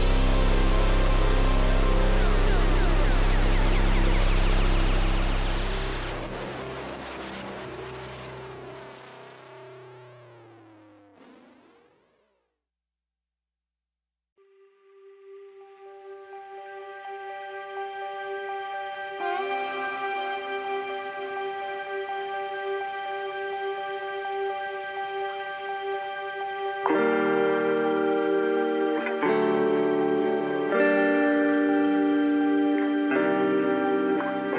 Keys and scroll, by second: 0.6 ctrl+-, 15.2 ctrl+alt+z, 15.9 ctrl+=, 15.9 ctrl+-, 16.8 ctrl+=, 17.4 space, 20.8 ctrl+-, 24.7 ctrl+=, 24.9 ctrl+-, 26.7 ctrl+=, 27.6 space.